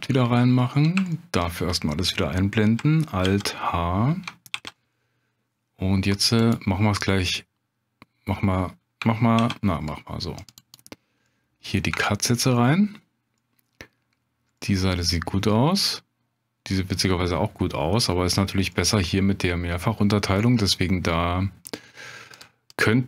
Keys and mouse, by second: 1.1 shift+click, 3.2 alt+h, 4.5 ctrl+r, 9.4 ctrl+r, 11.2 click, 13.0 Tab, 13.4-13.9 drag, 14.6-14.9 drag, 14.9-17.8 middle drag, 18.7 middle drag, 21.6 click, 22.3 click, 22.8 click.